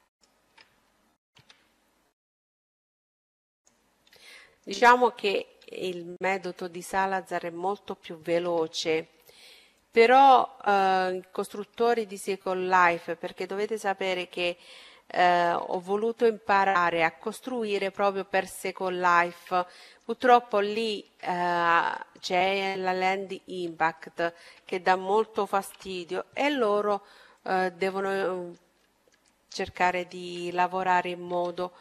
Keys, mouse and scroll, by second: 1.3 w, 4.2-7.4 middle drag, 7.4 scroll up 1, 8.2 a, 8.3-9.4 scroll down 1, 9.4-11.3 right drag, 10.0-12.8 middle drag, 12.0-13.9 right drag, 15.3 w, 18.1-25.5 middle drag, 25.3 a, 26.9-28.8 right drag, 27.6-30.4 middle drag, 29.5-31.4 right drag, 30.9 w.